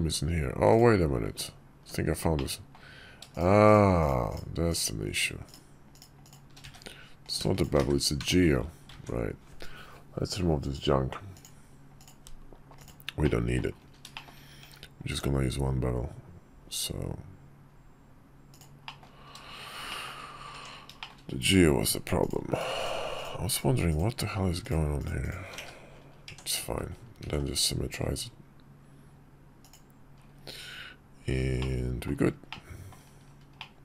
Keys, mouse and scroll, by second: 0.4 click, 2.1 Tab, 2.1 middle click, 3.0 shift+click, 3.4 shift+click, 3.7 shift+click, 4.0 shift+click, 4.4 shift+click, 4.8 shift+click, 5.2 shift+click, 5.6 shift+click, 5.9 shift+click, 6.3 1, 7.0 click, 7.3 shift+click, 7.5 1, 7.9 Tab, 8.6 ctrl+`, 13.0 click, 13.8 shift+middle drag, 14.3 q, 18.6 middle click, 19.6 shift+click, 20.3 Tab, 20.7 shift+click, 21.9 click, 22.3 shift+click, 22.9 shift+click, 23.2 shift+click, 23.6 shift+click, 24.3 shift+click, 24.7 shift+click, 24.9 shift+click, 25.3 1, 26.0 Tab, 27.0 alt+x, 29.4 middle click, 31.3 middle click, 32.2 middle click, 33.3 middle click.